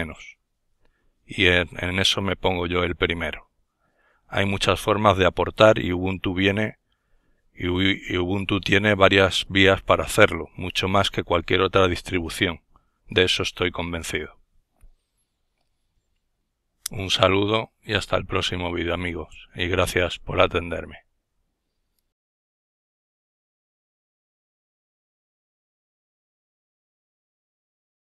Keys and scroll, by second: 0.2 ctrl+alt+ワ, 3.7 ctrl+alt+1.